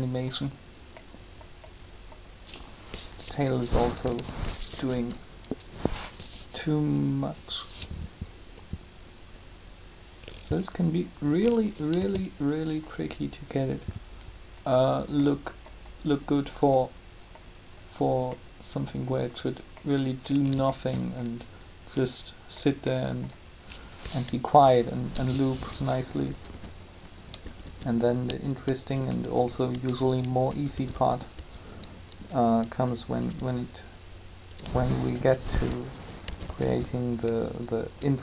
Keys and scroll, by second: 4.0 1, 12.0 alt+a, 24.3 7, 26.4 Up.